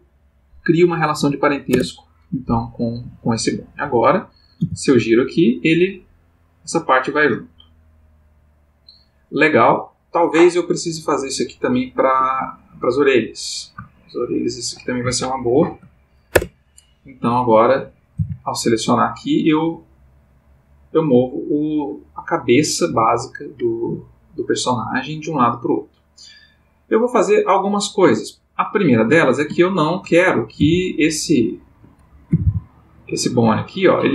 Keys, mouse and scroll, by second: 1.7 Return, 2.9 click, 3.8 click, 4.6 r, 12.1 Escape, 12.9 click, 14.1 shift+click, 15.6 ctrl+p, 16.3 Return, 17.4 click, 18.1 r, 29.1 Escape, 29.6 ctrl+middle click, 30.6 r, 31.6 Escape, 32.2 r.